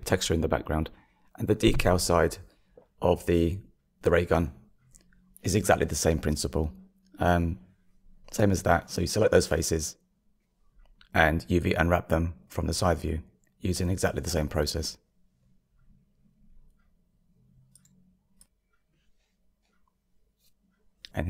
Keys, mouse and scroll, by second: 0.5 shift+middle click, 1.3 click, 2.0 Tab, 2.5-11.9 middle drag, 11.9 KP_3, 12.0-13.9 shift+middle drag, 20.0 Tab.